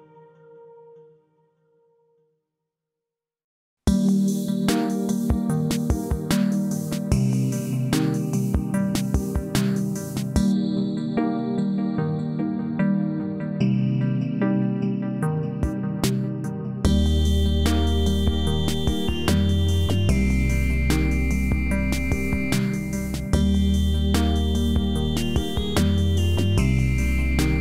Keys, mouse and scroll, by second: 4.9 scroll up 1, 5.5-6.5 alt+middle drag, 7.3 click, 12.6-13.2 click, 17.2 click, 19.4 click, 22.3 right click, 23.4-26.9 drag.